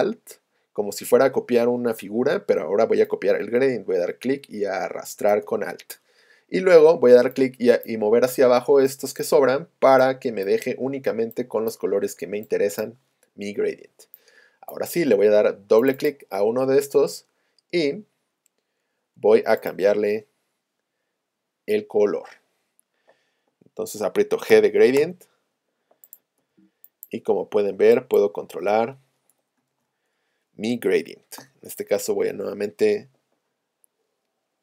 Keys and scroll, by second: 24.5 g, 26.5 g, 31.4 v.